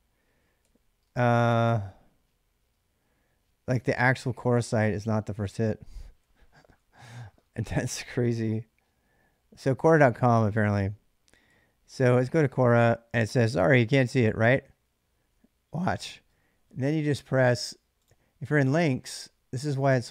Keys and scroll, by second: 0.4 typing, 0.8 Tab, 2.2-7.1 typing, 11.3 j, 11.7 l.